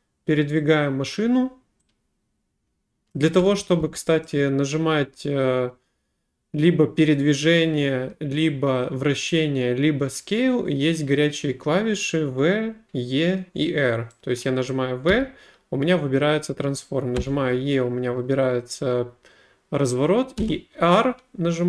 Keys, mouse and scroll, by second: 3.1 click, 3.4 a, 3.8 a, 4.3 right click, 14.7 right click, 15.1 w, 17.2 e, 20.4 r.